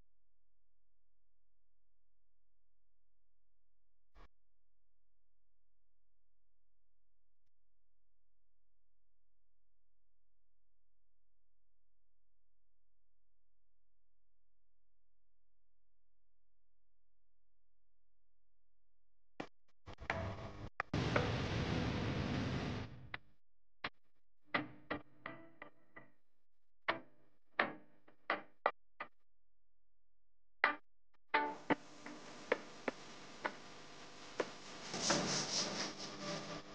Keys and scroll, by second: 1.8 p, 9.2 a, 18.8 p, 22.4 a.